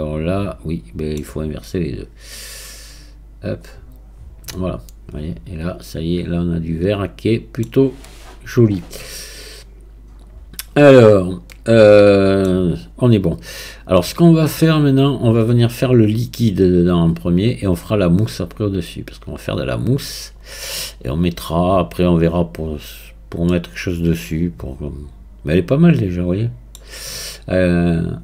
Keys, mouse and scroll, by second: 4.6-7.6 middle drag, 8.1-9.1 scroll down 2, 9.1-10.3 scroll down 1, 10.3 click, 11.0-11.5 scroll down 2, 11.5-14.6 middle drag, 22.9-23.5 scroll up 1, 23.5-26.5 middle drag.